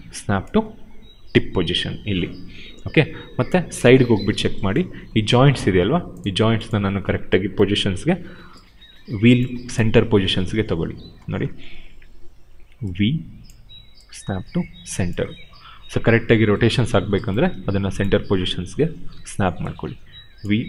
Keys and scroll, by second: 2.3 w, 3.3 space, 5.4 w, 7.9 v, 12.2 v, 19.0 v.